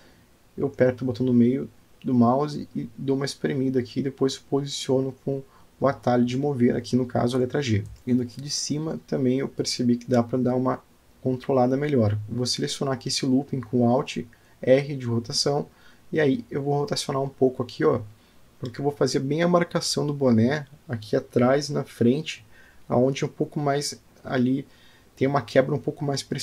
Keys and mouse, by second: 4.7 g, 9.6 Tab, 9.7-11.3 middle drag, 11.5 Tab, 12.5 click, 14.5 alt+click, 16.1 middle click, 17.7 r, 20.7 g, 24.7 alt+click.